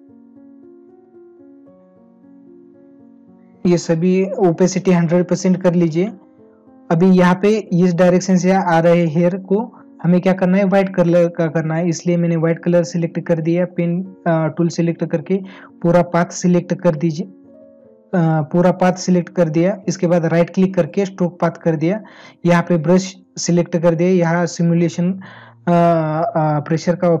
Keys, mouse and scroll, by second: 19.8 right click.